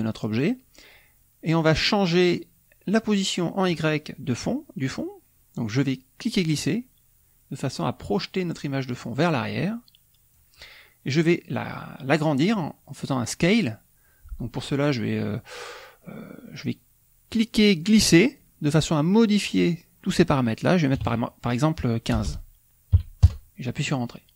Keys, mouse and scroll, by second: 6.1-11.2 drag, 17.2-19.2 drag, 20.9 KP_1, 21.0 KP_5, 22.1 BackSpace, 22.9 KP_5, 23.2 KP_Enter.